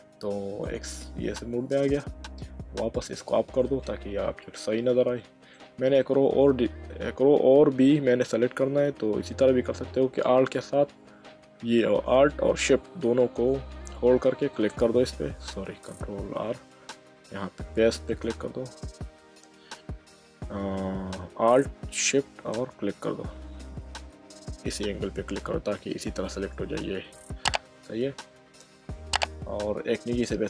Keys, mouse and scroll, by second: 0.6 click, 3.1 click, 3.8 middle click, 14.5 click, 16.4 ctrl+z, 18.1 click, 22.5 alt+shift+click, 24.0 ctrl+z, 25.9 alt+shift+click.